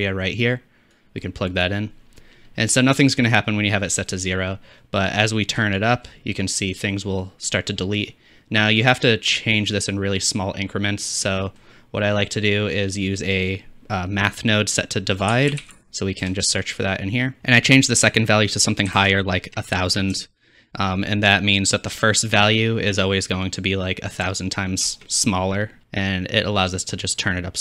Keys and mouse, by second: 2.6-4.4 middle drag, 10.7 shift+middle click, 17.4-27.6 drag, 18.5-24.3 right drag, 19.2 KP_0.